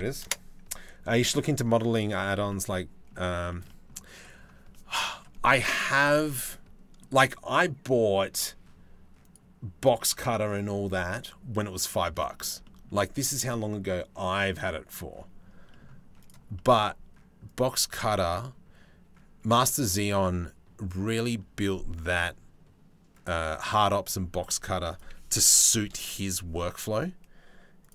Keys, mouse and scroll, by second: 2.1 middle click, 3.1 shift+middle click, 3.3 middle click, 4.3 middle click, 6.1 middle click, 11.9 middle click, 12.2 shift+middle click, 15.3 middle click, 15.8 click, 16.2 click, 17.1-22.9 drag, 24.5 click, 27.5 click, 27.8 click.